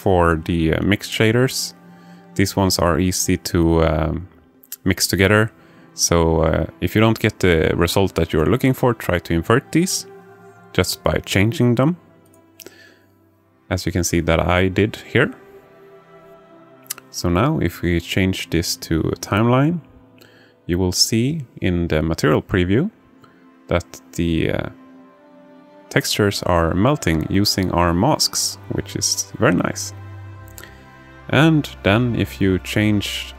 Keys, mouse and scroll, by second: 0.1 click, 5.0-7.8 alt+middle drag, 12.6-13.8 drag, 14.5-16.0 drag, 17.6-30.2 drag, 31.5 click.